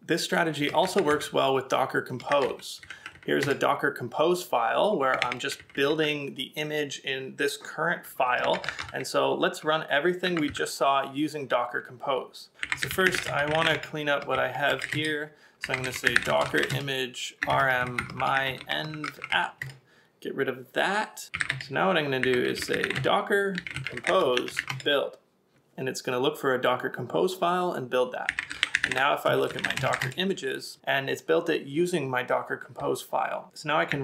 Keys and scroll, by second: 1.1 ctrl+a, 1.5 k, 2.4 ctrl+w, 2.7 h, 3.1 j, 3.5 Return, 5.0-6.2 typing, 8.5 ctrl+c, 8.8 ctrl+a, 10.3 ctrl+a, 12.9 d, 15.6 d, 21.2-24.1 typing, 28.3 typing, 33.9 c.